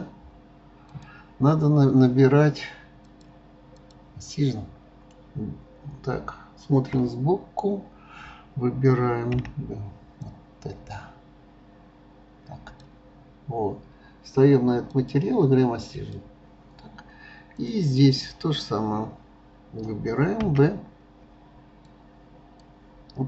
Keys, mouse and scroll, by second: 0.9 click, 3.0-4.0 drag, 14.9 click, 15.9 click, 17.6 click.